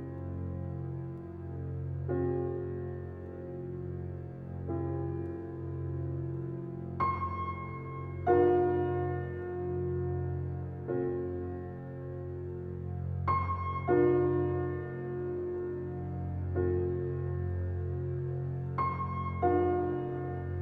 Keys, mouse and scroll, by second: 1.3-2.2 scroll down 1, 3.8-5.4 typing, 7.4 click, 9.3 scroll up 1, 9.6-10.4 scroll down 1, 10.4-12.1 drag, 11.8-13.0 typing, 14.6 right click, 15.9 click, 18.4-18.9 scroll up 1, 18.9 scroll down 1.